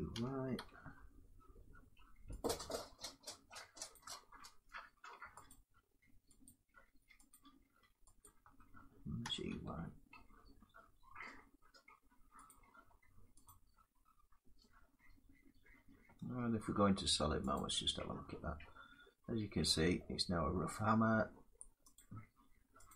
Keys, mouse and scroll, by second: 1.2 y, 2.1 click, 3.6 click, 5.2 alt+click, 6.1 click, 7.2 click, 8.0 click, 8.9 g, 9.2 y, 12.2 click, 12.8-13.4 typing, 13.2 click, 15.9 middle click, 17.2 click, 17.8 scroll down 3, 18.5 scroll down 1, 19.3-19.7 scroll down 2, 20.2 middle click, 21.6 click, 21.6 scroll down 1, 22.6 click.